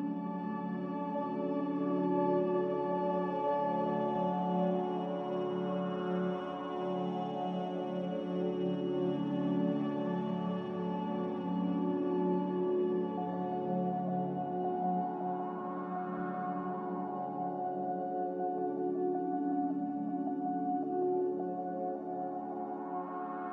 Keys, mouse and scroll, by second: 11.4 m, 14.7 click, 19.8 click, 21.9 a, 22.5 ctrl+s.